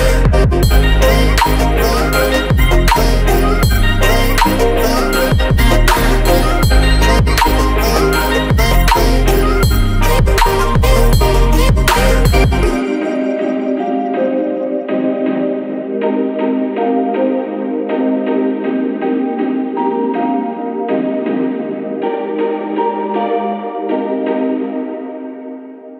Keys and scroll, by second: 5.9 Return, 9.8 Down, 14.9-19.3 typing.